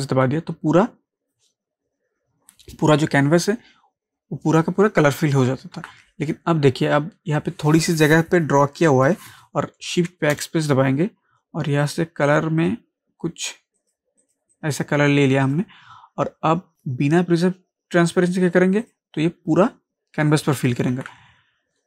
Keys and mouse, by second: 5.5 click, 5.8 ctrl+z, 11.8 click, 18.8 click, 20.9 ctrl+z.